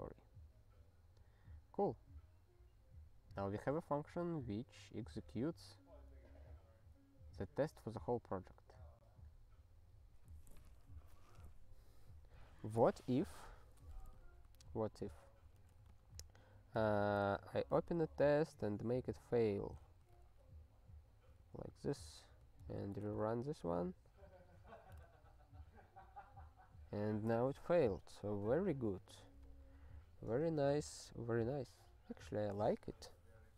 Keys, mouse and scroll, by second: 13.7 click, 13.8 click, 14.4 super+b, 15.6 ctrl+g, 15.9 super+b, 19.5 click, 19.6 click, 19.8 0, 20.2 ctrl+s, 21.4 super+b, 22.6 ctrl+p, 22.8 ctrl+e, 27.5 super+o, 28.1 super+b, 29.1 ctrl+/, 29.5 ctrl+s.